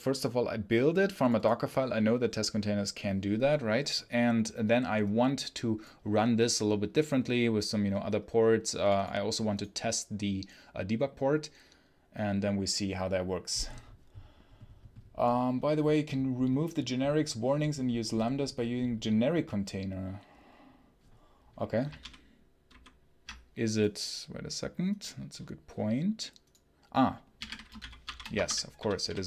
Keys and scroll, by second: 22.5 ctrl+super+h, 27.0-29.2 typing.